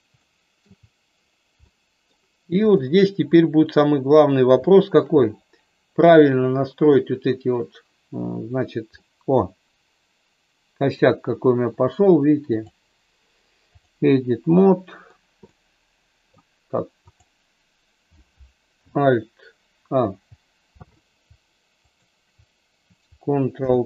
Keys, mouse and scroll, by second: 0.2 shift+middle click, 1.5 middle click, 2.7-3.9 drag, 4.7 shift+middle click, 5.2-6.2 middle drag, 8.9-11.0 middle drag, 12.4-14.0 drag, 14.6 middle click, 15.4 middle click, 17.1 click, 21.8 shift+click, 23.4 ctrl+p.